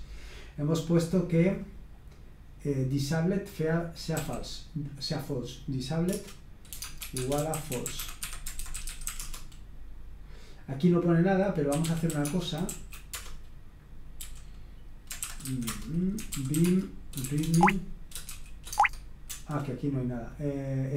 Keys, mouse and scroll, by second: 2.0-4.1 scroll down 1, 4.1 d, 6.1 Return, 6.7-9.6 typing, 11.5-13.1 typing, 14.2 typing, 15.2-19.5 typing.